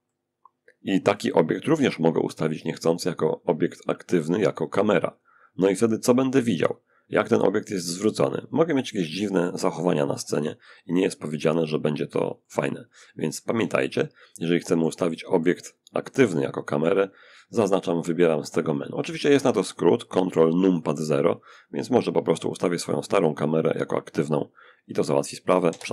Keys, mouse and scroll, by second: 2.4 click, 4.4 click, 7.9-8.9 middle drag, 8.9-11.5 scroll up 1, 11.5 shift+scroll up 1, 11.7-15.2 shift+middle drag, 15.6 click, 17.5 click, 21.0-21.6 scroll down 1, 22.1 click, 23.0-24.7 drag, 23.6-24.9 middle drag, 25.0 ctrl+0.